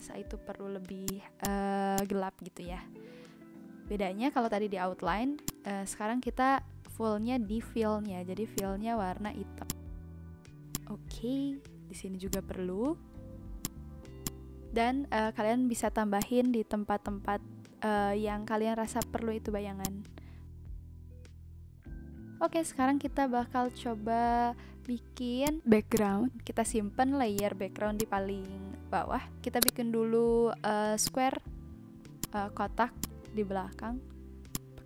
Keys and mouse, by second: 0.9 v, 1.0 click, 2.2 Delete, 4.5 n, 5.4 click, 8.5 click, 9.6 click, 10.5 v, 10.7 click, 12.2 click, 12.9 n, 13.6 click, 14.2 click, 15.7 ctrl+z, 16.2 click, 19.0 click, 19.8 click, 25.4 click, 27.3 click, 29.6 click, 30.2 b, 30.2 a, 30.4 c, 30.4 k, 30.5 Return, 31.0 click, 32.2 click, 33.1 click, 34.5 click.